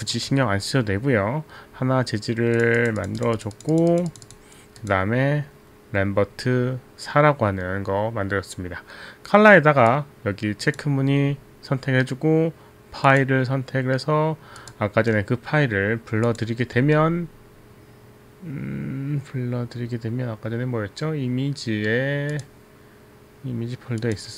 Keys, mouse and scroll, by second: 2.8 click, 10.1 click, 13.1 click, 14.8 click, 16.2 click, 16.8 z, 22.3 click, 24.0 click.